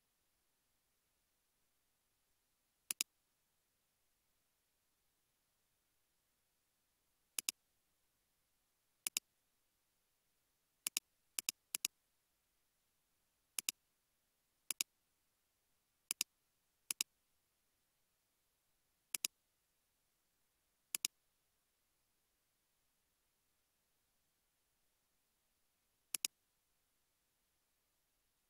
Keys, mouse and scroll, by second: 0.9 space, 1.6 space, 5.1 space, 11.8 double click, 12.4 scroll up 1, 19.8 space, 20.2 space, 25.0 space.